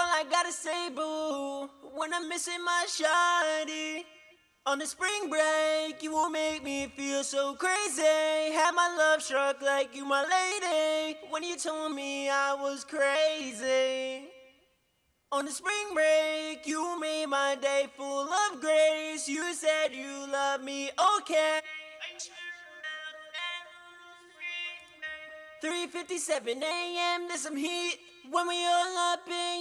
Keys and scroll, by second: 6.3-7.2 typing.